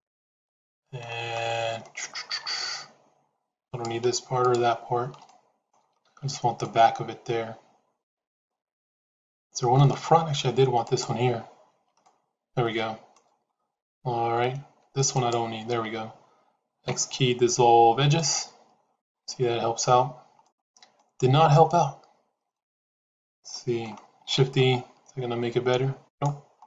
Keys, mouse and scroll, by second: 1.7 middle click, 4.3 shift+click, 5.1 middle click, 6.2 shift+z, 6.5-9.7 middle drag, 10.7 shift+click, 11.9-13.0 middle drag, 16.7 x, 19.3 shift+z, 20.3 middle click, 22.4 middle click, 23.5 middle click, 24.2 shift+e.